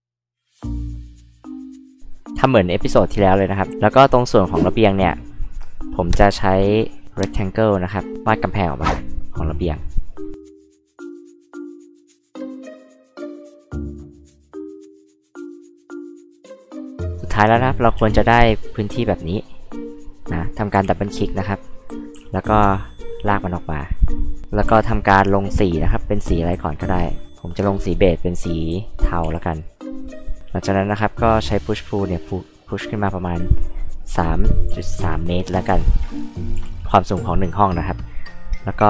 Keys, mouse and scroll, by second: 0.1 f, 0.7-2.0 drag, 3.7 click, 4.6 r, 7.8 click, 8.1 click, 9.3 click, 11.2 click, 11.6 e, 11.7 click, 12.2 ctrl+z, 12.7 l, 13.2 click, 13.5 click, 13.7 e, 13.8 click, 14.9 click, 15.7 click, 16.4 h, 16.4 click, 18.0 space, 18.8 click, 19.6 click, 19.7 click, 20.7 h, 20.8 click, 22.1 m, 22.7 ctrl+click, 24.1 ctrl+click, 24.4 click, 24.7 b, 26.9 click, 27.6 click, 29.2 e, 29.7 click, 31.3-33.4 drag, 34.2-36.6 typing, 36.0 Return, 36.9 click.